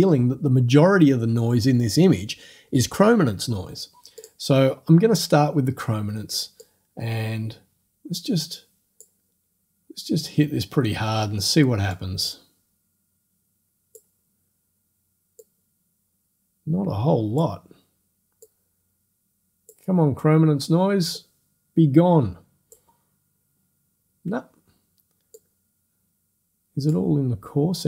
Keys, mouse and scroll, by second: 4.2 click, 6.6-9.2 drag, 9.2-10.8 middle drag, 9.2-10.2 scroll up 2, 10.2-10.8 scroll up 1, 12.0-14.2 drag, 15.4-17.6 drag, 18.5-19.9 drag, 21.2-22.9 drag, 25.4-27.1 drag.